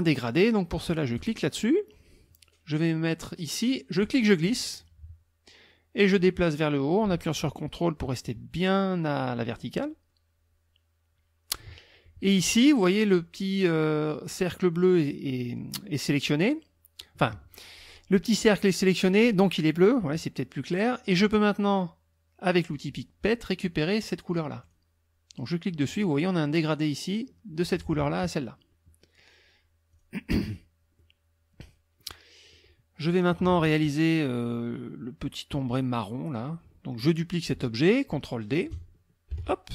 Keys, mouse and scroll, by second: 1.2 click, 4.0-11.7 drag, 22.5 click, 24.6 click, 29.9 click, 31.0-32.2 drag, 32.5 click, 39.3 ctrl+d.